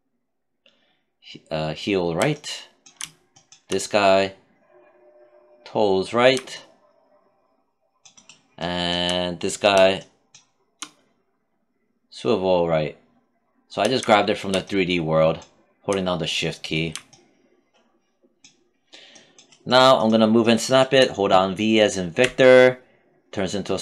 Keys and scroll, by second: 21.6 v.